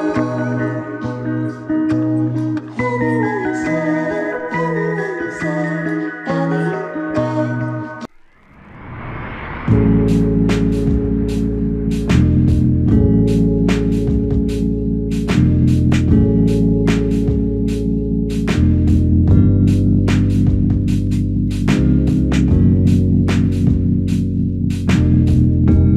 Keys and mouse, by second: 2.9 alt+click, 3.6 shift+click, 8.7 alt+click, 11.1 alt+click, 12.3 alt+click, 13.2 f, 14.2 double click, 21.3 alt+click, 22.5 double click.